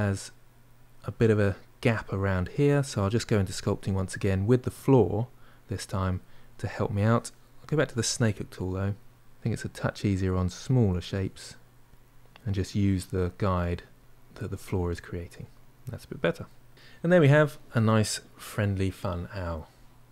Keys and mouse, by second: 4.6 click, 5.3-7.5 middle drag, 7.5-9.0 drag, 9.0 ctrl+middle click, 9.8 click, 10.2 middle click, 11.1 click, 11.8 middle click, 12.5 click, 13.2-14.3 middle drag, 14.3 click, 14.6 middle click, 14.9 shift+click, 15.2-20.1 middle drag.